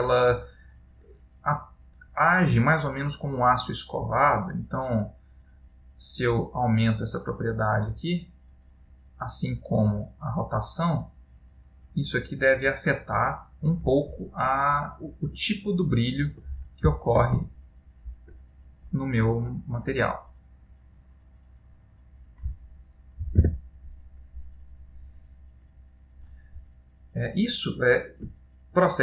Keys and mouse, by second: 4.2 click, 10.5 click, 14.4 middle click, 15.6 ctrl+middle click, 20.2 ctrl+middle click, 20.2 click, 25.4 middle click, 26.8 middle click.